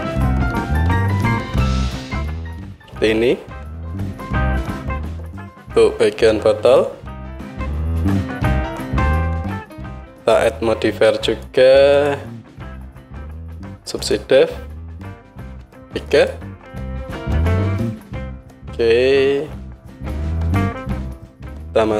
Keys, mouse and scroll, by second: 1.3 Tab, 4.6 KP_1, 7.2 middle click, 8.0 click, 8.0 middle drag, 8.2 click, 8.2 middle click, 8.9-12.1 drag, 12.1 middle click, 13.0-21.9 drag.